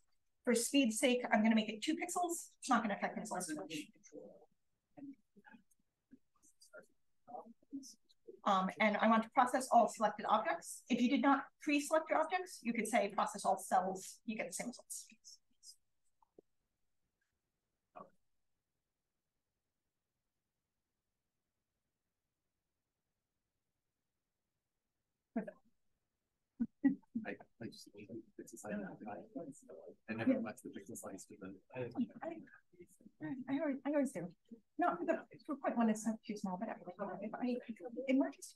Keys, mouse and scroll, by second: 0.5 7, 4.8 BackSpace, 5.6 6, 8.6-13.8 drag, 15.7 click.